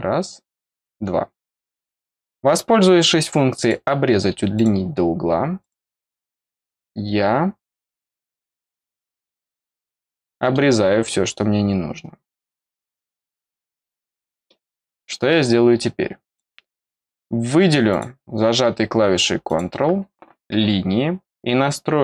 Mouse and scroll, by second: 0.6 click, 3.5 click, 4.5 click, 5.5 click, 8.0 click, 9.1 click, 10.1 middle click, 16.2 click, 17.8 click, 19.4 click.